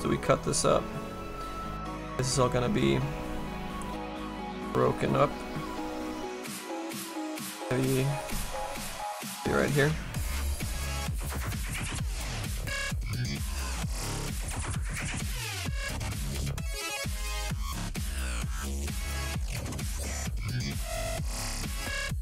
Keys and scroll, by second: 16.4 s.